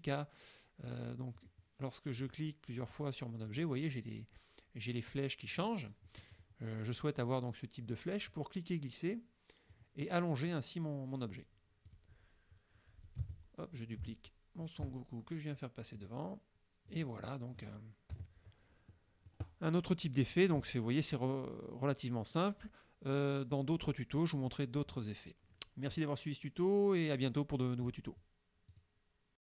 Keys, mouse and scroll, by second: 1.5 click, 2.3 click, 2.9 click, 3.6 click, 5.6 click, 6.4 click, 8.4-10.0 drag, 11.9 click, 13.1-14.9 drag, 13.3 space, 16.1 click, 17.0 click, 18.2 KP_Subtract, 19.0 click, 28.8 click, 29.4 click.